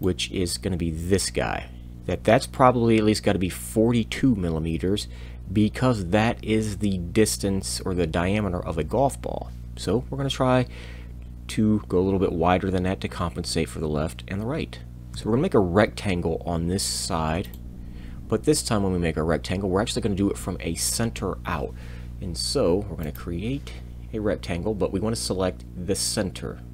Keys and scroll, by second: 15.1 r.